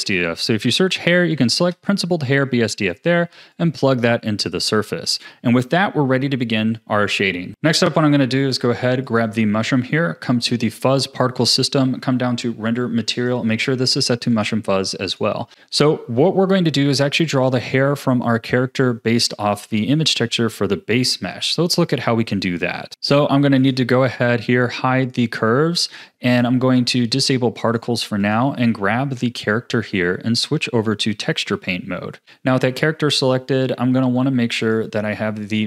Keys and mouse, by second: 3.5 click, 13.2-14.6 drag, 15.1 click, 15.5 ctrl+s, 27.7 click, 28.6 z, 29.9 Tab, 34.6 click, 35.4 click.